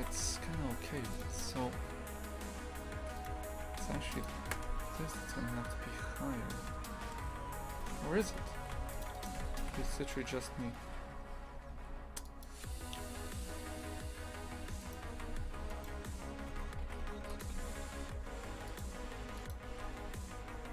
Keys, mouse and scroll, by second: 0.0 shift+f, 1.4 right click, 3.1 right click, 3.4 Tab, 3.6 shift+f, 4.5 KP_0, 5.3 Tab, 6.3 Tab, 7.0 KP_0, 7.5 Tab, 7.8 shift+f, 9.1 right click, 9.4 Tab, 9.6 shift+f, 14.5 Tab, 14.8 right click, 15.1 shift+f, 16.5 Tab, 16.8 shift+f, 17.5 a, 18.0 ctrl+r.